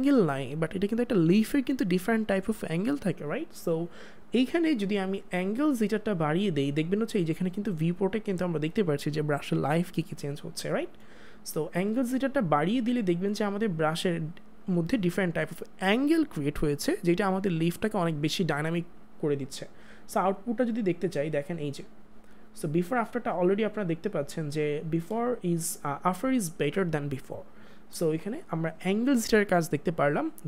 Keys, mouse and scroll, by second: 5.9 click, 12.0 click, 25.1 ctrl+space, 25.3 ctrl+click, 25.6 ctrl+space, 28.0 ctrl+space, 28.2 ctrl+click, 28.5 space.